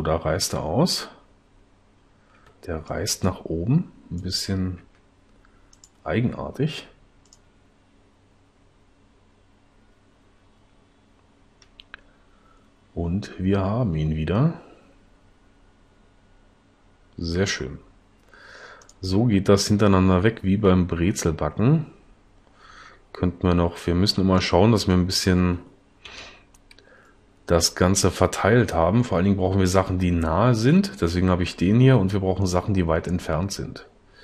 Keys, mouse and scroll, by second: 4.8 s, 26.2 l.